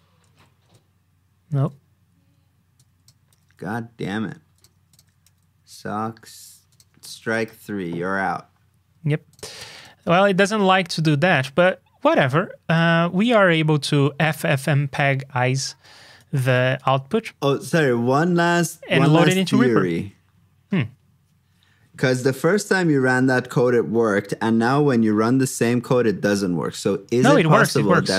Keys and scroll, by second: 0.2 super+v, 1.6 super+Tab, 3.2 super+c, 3.4 super+Tab, 5.6 super+v, 7.0 super+c, 7.6 super+v, 18.2 super+s, 19.0 super+Tab, 19.9 shift+super+Tab, 27.0 super+c, 27.4 super+v.